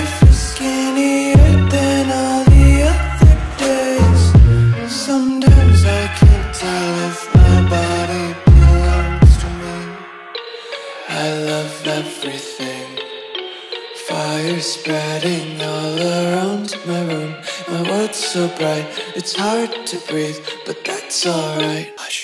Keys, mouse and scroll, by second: 0.1 click, 0.5 alt+scroll down 1, 1.7 click, 5.3 alt+Num_Lock, 5.3 scroll up 2, 6.3 scroll up 1, 6.9 click, 8.5 alt+Tab, 9.5 alt+click, 11.3-12.6 typing, 11.8 ctrl+a, 13.2 ctrl+v, 14.3 click, 14.9-16.1 typing, 15.8 Right, 16.4 Right, 16.9 Right, 17.2 t, 17.3 Right, 18.6 Right, 20.5 l, 20.6 Right, 21.9 BackSpace.